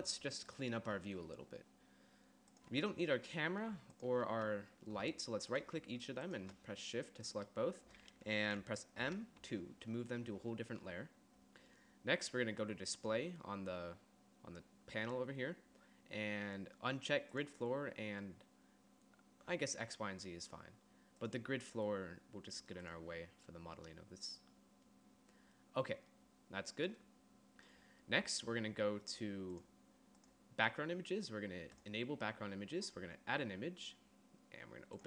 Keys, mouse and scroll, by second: 4.0-8.1 drag, 9.1 m, 29.6-31.8 drag.